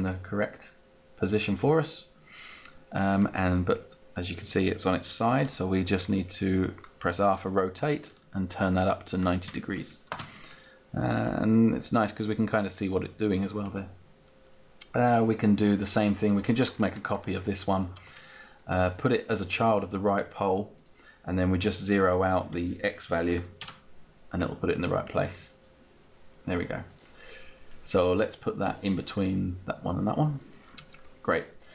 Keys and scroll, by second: 5.5 r, 10.2 space, 23.3 BackSpace, 23.5 Return.